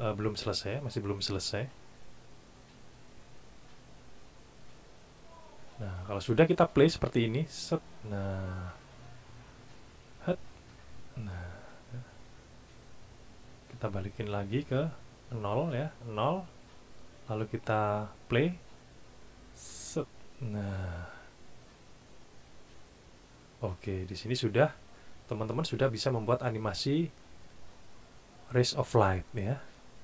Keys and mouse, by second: 6.9 click, 14.4 click, 18.7 click, 26.4 click.